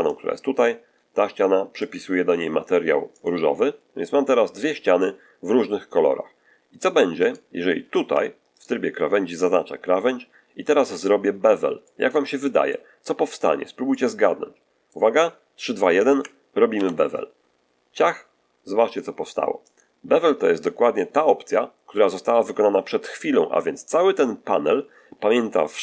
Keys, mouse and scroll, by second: 1.7 click, 3.0 click, 4.1 middle click, 7.1 right click, 8.0 2, 8.4 right click, 10.9 middle click, 11.7 middle click, 12.3 middle click, 13.8-15.0 middle drag, 16.6 ctrl+b, 19.6 click.